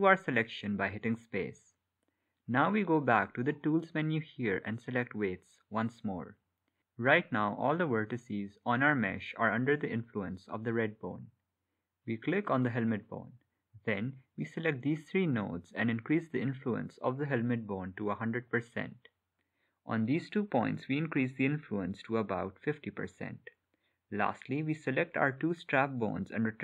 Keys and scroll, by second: 23.3 space, 25.6 Escape.